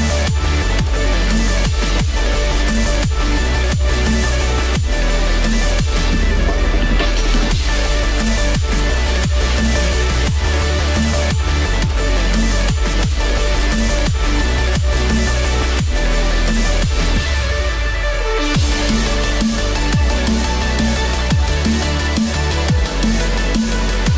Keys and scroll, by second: 9.6 ctrl+z.